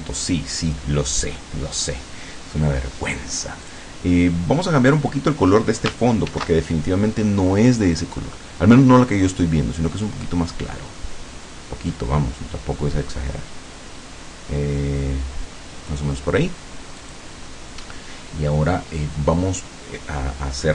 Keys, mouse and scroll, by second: 3.7 click, 6.3 ctrl+shift+f, 7.6 click, 10.1-16.2 drag, 17.1 click, 17.9 scroll up 2, 18.7 scroll down 2.